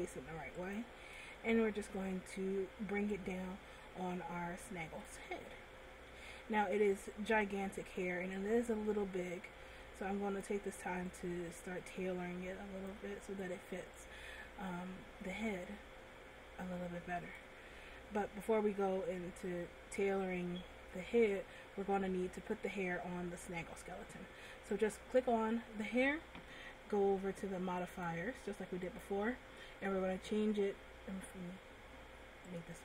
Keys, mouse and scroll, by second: 0.8 shift+click, 1.6 middle click, 3.3 click, 6.4-6.8 scroll up 3, 7.0 middle click, 8.5 click, 11.3 click, 14.2 click, 18.0 middle click, 22.5 click, 25.1 right click, 28.0 click, 29.0 click, 32.7 click.